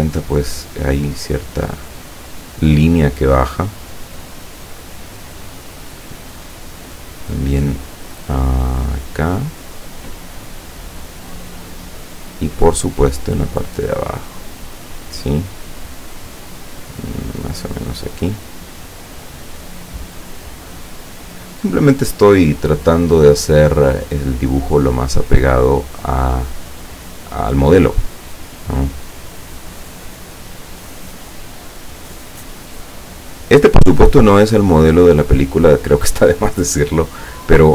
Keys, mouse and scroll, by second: 1.7 click, 5.3 click, 9.4 click, 11.1 click, 17.4 click, 20.9 click, 26.1 click, 29.2 click, 33.6 click, 35.3 click, 37.4 click.